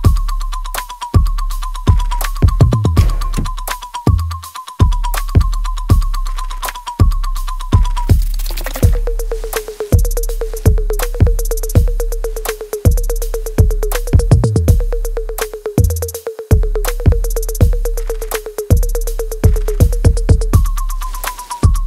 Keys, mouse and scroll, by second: 0.5 scroll up 1, 1.3 scroll down 1, 1.6 scroll up 1, 3.1 click, 8.8 click, 10.5 Right, 11.3 BackSpace, 12.1 4, 14.8 9, 15.1 BackSpace, 15.7 Right, 16.3 BackSpace, 16.6 9, 19.5-20.1 scroll up 1, 20.1 middle click.